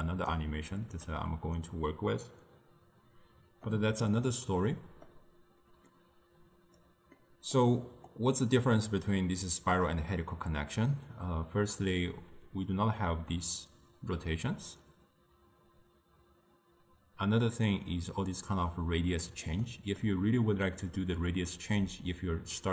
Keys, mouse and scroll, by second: 0.4 right click, 1.0 d.